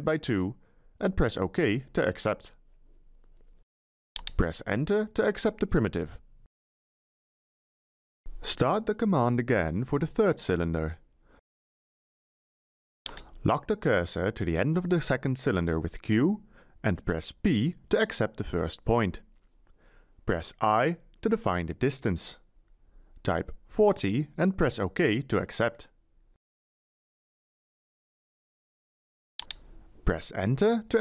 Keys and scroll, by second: 0.0-0.4 typing, 5.1 Return, 16.3 q, 18.2 p, 22.4 Delete, 24.1 4, 24.4 0.